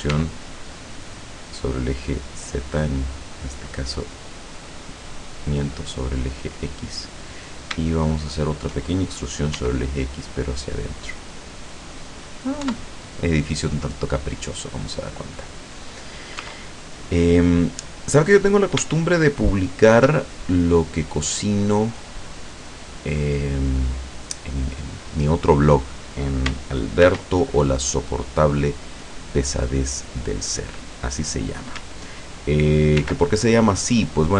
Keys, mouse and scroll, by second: 0.3 e, 5.7 click, 7.3 right click, 8.3 shift+right click, 9.6 e, 11.5 click, 11.9 scroll down 2, 12.7 Tab, 15.7 right click, 16.4 Tab, 16.8 right click, 18.9 shift+right click, 19.2-22.3 shift+middle drag, 22.4-23.0 scroll up 1, 27.9 click, 31.0 click, 33.1 ctrl+r, 33.9 click.